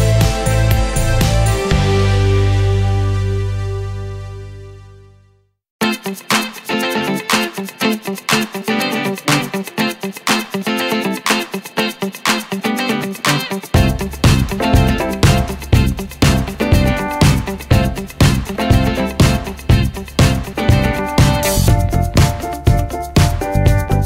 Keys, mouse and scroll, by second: 0.1 ctrl+shift+q, 1.3 click, 1.4-5.5 drag, 5.5 ctrl+space, 5.8 scroll down 1, 10.1 scroll up 1, 11.1-19.0 drag, 19.0 ctrl+space, 19.3 scroll down 1, 21.4 click, 21.8 scroll down 1, 22.3 click, 23.0 scroll up 1, 23.6 click.